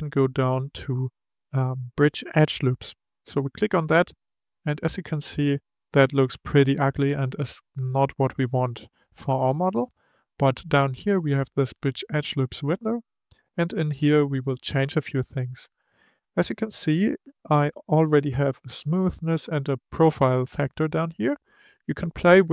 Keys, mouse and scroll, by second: 4.8-7.6 middle drag, 7.6-10.8 scroll up 2, 12.2 click.